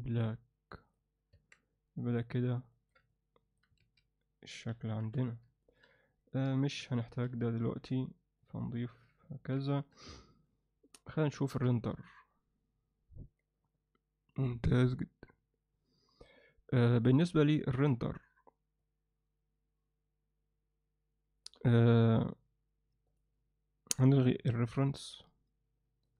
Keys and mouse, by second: 0.8 click, 1.3 Tab, 2.1 drag, 2.7 ctrl+alt+middle click, 3.1-3.6 alt+middle drag, 3.8 alt+a, 4.7 KP_Divide, 5.0 KP_1, 5.6 ctrl+alt+middle click, 6.2 drag, 6.6 alt+shift+middle drag, 7.0 ctrl+alt+middle click, 7.8 m, 8.8 ctrl+alt+middle click, 9.3 ctrl+alt+middle click, 9.7 alt+shift+middle click, 10.1-10.5 ctrl+alt+middle drag, 10.9-11.5 ctrl+alt+middle drag, 17.1 click, 18.8-21.5 drag, 23.1 drag, 24.5 click, 24.9 ctrl+alt+middle click, 25.3-26.1 alt+middle drag.